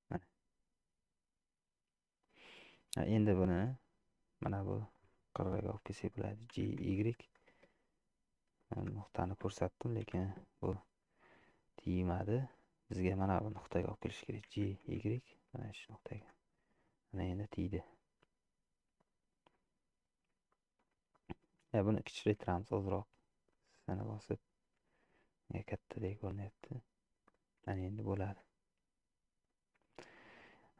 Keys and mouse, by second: 3.1 middle click, 5.5 middle click, 6.6 g, 10.1 KP_Decimal, 11.3-12.7 drag, 14.7 g, 17.0 click, 17.2-19.0 middle drag, 19.7 middle click, 20.6 shift+middle click, 22.4 s, 25.6-27.5 middle drag, 28.3-29.7 middle drag, 30.1 shift+middle click.